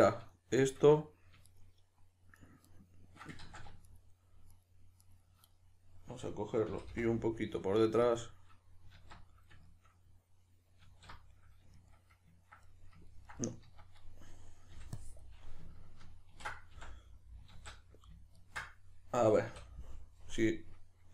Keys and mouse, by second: 1.4 shift+right click, 2.4 shift+right click, 2.6 shift+right click, 3.4 ctrl+z, 3.8 shift+right click, 4.5 shift+right click, 5.0 shift+right click, 5.5-8.2 middle drag, 6.7 g, 8.2 click, 9.0 alt+q, 9.6-21.1 shift+middle drag, 10.8 alt+q, 13.6 z, 14.7 b, 19.5 a, 20.1 KP_Decimal.